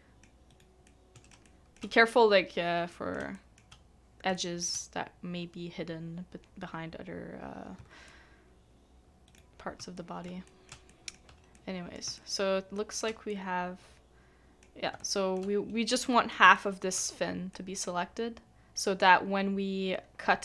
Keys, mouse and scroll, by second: 0.5 right click, 0.8 middle click, 1.4 shift+middle click, 3.3 shift+middle click, 4.3 shift+middle click, 8.0 c, 8.1 middle click, 9.3 right click, 9.9 shift+middle click, 10.4 middle click, 10.9 shift+middle click, 12.1 shift+middle click, 13.3 shift+middle click, 15.0 shift+middle click, 15.5 scroll down 1, 15.6-15.9 scroll up 1, 15.9 middle click, 16.5 shift+middle click.